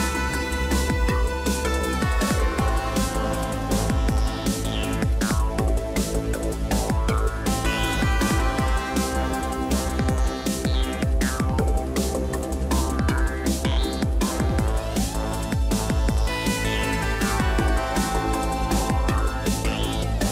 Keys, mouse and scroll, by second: 8.1 ctrl+j, 9.5 ctrl+click, 10.1 ctrl+click, 13.9 right click, 14.0 right click.